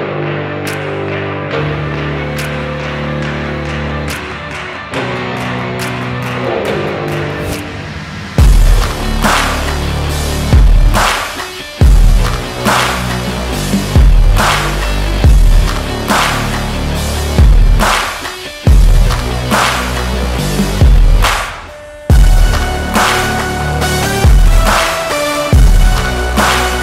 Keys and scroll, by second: 4.4 Return, 6.4 ctrl+z, 11.8 ctrl+z, 13.2 ctrl+j, 15.0 ctrl+t, 16.4 Return.